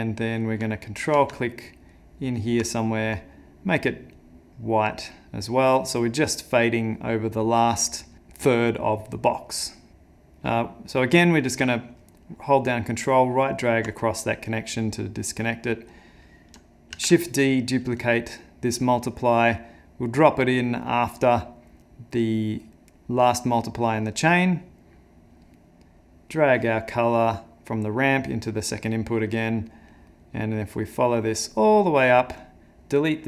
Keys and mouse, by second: 2.5 ctrl+click, 3.2 click, 5.1 click, 5.9 click, 13.1 ctrl+right click, 15.3 click, 15.9 click, 16.9 shift+d, 19.3 click, 23.9 click, 26.3 click, 28.9 click, 29.3 middle click, 29.9 middle click, 30.8 middle click, 32.4 click.